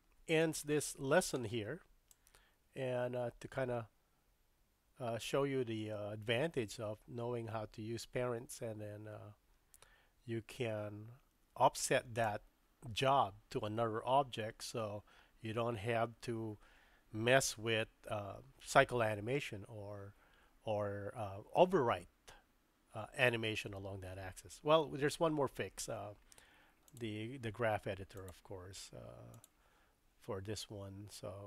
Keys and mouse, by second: 0.7-1.3 middle drag, 2.1-19.1 drag, 27.0-27.5 drag, 28.1-29.5 drag.